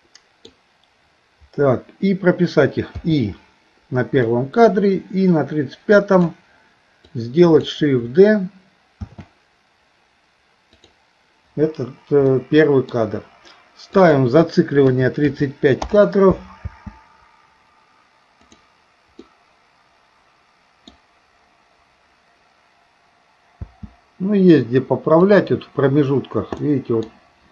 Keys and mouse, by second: 4.3-6.4 drag, 4.3 typing, 7.1 click, 9.1 shift+d, 12.3 middle click, 13.9-15.9 drag, 16.7 space, 18.5 click, 19.3-21.0 middle drag, 23.6 space, 25.3 click, 26.6 middle click.